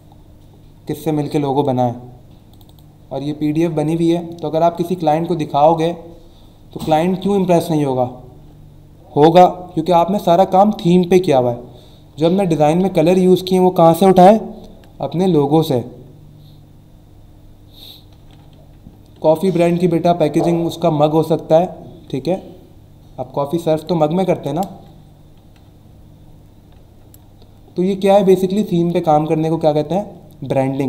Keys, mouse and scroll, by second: 2.5 click, 6.0 scroll down 1, 6.6-7.4 scroll down 2, 10.9-12.0 scroll up 3, 28.1 click.